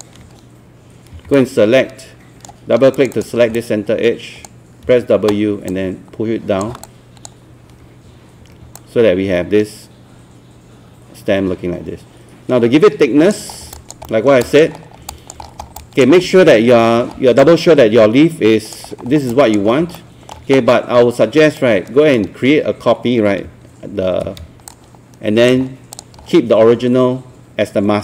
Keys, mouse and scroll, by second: 1.1 ctrl+q, 1.4 right click, 3.0 click, 3.7 alt+click, 4.9 alt+w, 5.7 click, 6.8-8.4 alt+drag, 8.4 alt+3, 8.8-13.2 alt+drag, 13.5 scroll down 1, 13.8 alt+click, 14.1 alt+middle click, 14.4 alt+click, 14.8 scroll up 1, 15.1 alt+click, 15.4 scroll down 1, 15.8 alt+click, 16.2 scroll up 1, 16.3 scroll down 1, 16.8-17.2 alt+scroll up 2, 17.4 alt+click, 18.9-19.3 scroll down 2, 19.3 alt+click, 19.7 scroll up 1, 20.0 alt+middle click, 21.6 right click, 24.7 shift+click, 26.0 click, 26.2-28.0 scroll down 1.